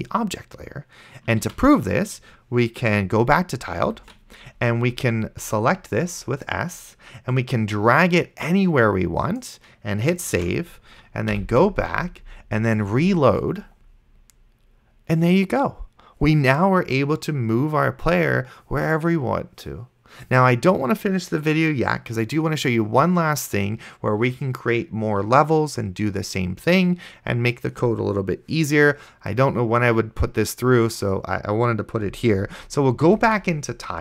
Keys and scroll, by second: 1.7 ctrl+s, 4.1 ctrl+super+Right, 10.6 ctrl+s, 11.6 ctrl+super+Left, 33.4 ctrl+super+Right.